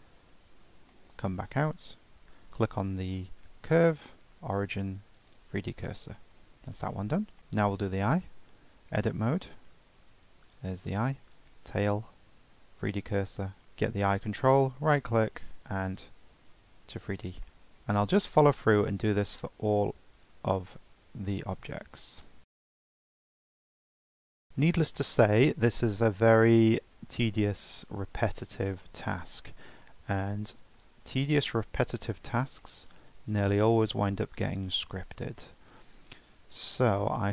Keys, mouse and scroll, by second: 0.0 Tab, 0.5 scroll down 3, 0.9-1.7 shift+middle drag, 1.7 click, 3.8-6.2 right drag, 6.2 shift+middle click, 6.5-6.9 scroll up 1, 6.9-7.4 shift+middle drag, 7.4 click, 8.4 Tab, 9.5 shift+middle click, 9.9-10.5 scroll up 2, 10.5 click, 11.3 click, 12.2 shift+s, 13.6 click, 14.3-17.1 right drag, 17.1 scroll up 2, 17.4-19.0 shift+middle drag, 19.0 click, 20.1 click, 21.2-22.1 middle drag, 22.1 click, 22.4 Tab, 22.9 scroll up 1, 23.0 Tab, 23.1 scroll down 2, 23.2 Tab, 23.2 scroll up 3, 23.3 click, 23.6 shift+s, 23.8-24.3 scroll down 2, 23.9 Tab, 24.3 click, 24.5 scroll up 1, 24.6-28.1 shift+middle drag, 28.6-31.5 right drag, 31.5-31.8 scroll down 4, 31.8-32.1 shift+middle drag, 32.1 scroll up 2, 32.6-33.3 shift+middle drag, 33.3 click, 33.7 middle click, 34.2 Tab, 34.7 Tab, 35.7 click, 36.1 Tab, 36.7 scroll up 1, 37.0 shift+middle click.